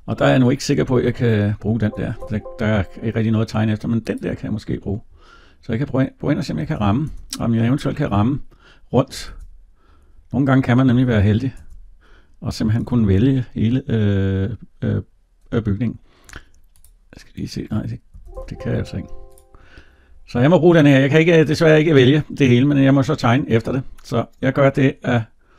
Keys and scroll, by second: 1.5 Tab, 18.0 Tab.